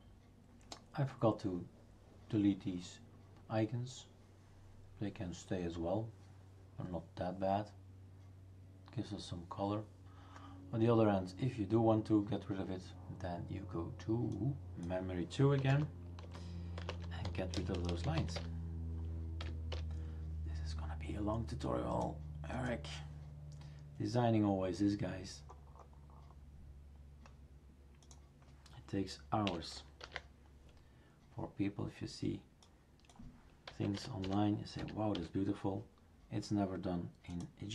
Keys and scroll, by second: 15.3-19.4 typing, 19.7 Return, 29.4 typing, 30.0 ctrl+s, 33.7-34.8 typing, 35.1 Return.